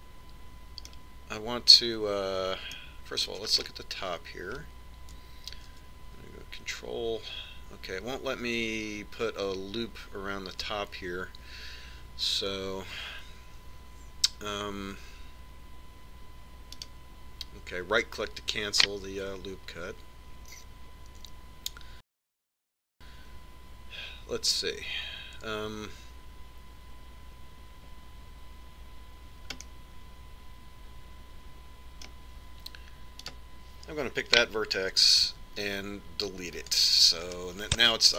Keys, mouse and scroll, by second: 4.6-7.2 middle drag, 7.4 middle click, 7.6 ctrl+r, 18.8-20.5 right drag, 30.7-32.5 middle drag, 34.3-36.1 right drag, 36.4 x.